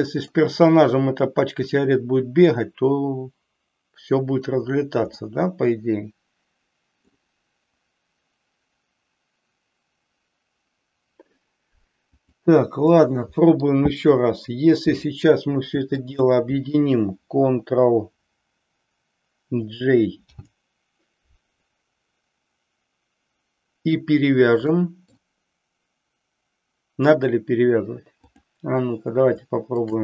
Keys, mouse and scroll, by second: 5.1-7.1 middle drag, 13.0 middle click, 15.9 shift+click, 20.3 ctrl+j, 24.6-25.4 middle drag, 28.3 click, 29.7 shift+click.